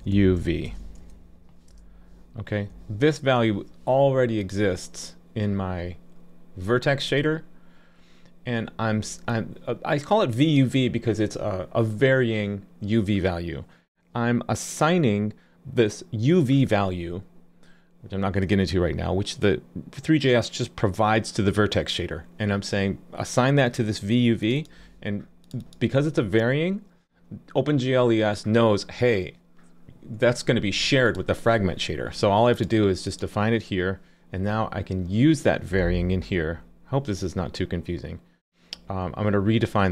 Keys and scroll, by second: 3.5 super+s.